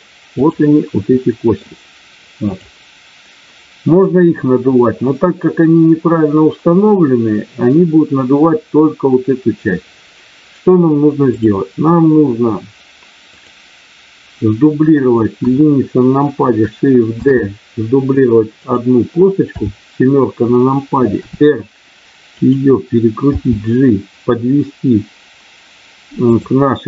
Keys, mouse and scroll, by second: 0.4 click, 1.0 middle click, 2.5 click, 11.2 click, 15.4 KP_1, 17.1 shift+d, 18.5 click, 19.5 KP_7, 21.2 r, 22.4 click, 23.4 g, 26.2 click.